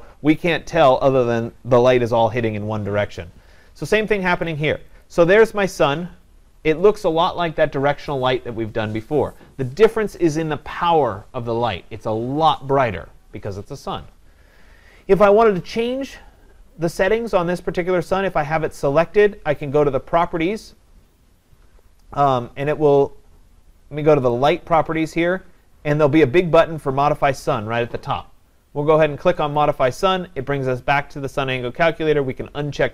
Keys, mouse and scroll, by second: 5.0-10.1 drag, 20.2-22.1 drag, 24.5 click, 25.1-32.9 drag.